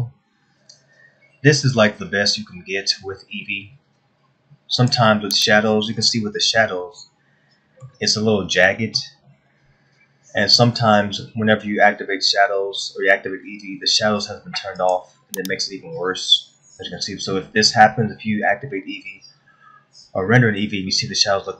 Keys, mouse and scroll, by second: 0.9-1.2 scroll down 4, 1.8 scroll down 1, 2.4 scroll down 1, 5.4 click, 7.6 shift+middle click, 10.8-11.3 scroll down 4, 15.4 click.